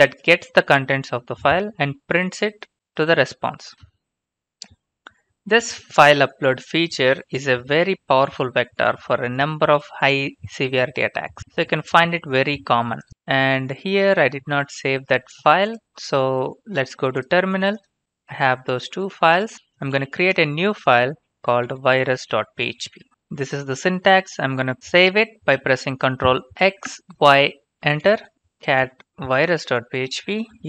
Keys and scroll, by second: 1.2 ctrl+c, 18.2 typing, 18.5 Return, 19.6-23.6 typing, 26.6 ctrl+x, 27.1-30.5 typing, 28.0 Return.